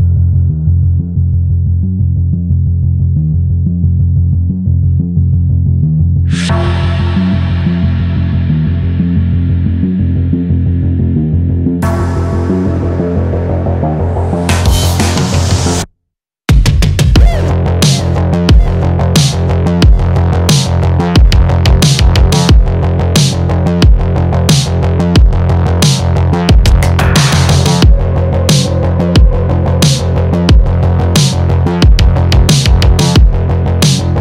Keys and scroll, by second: 10.3 Return.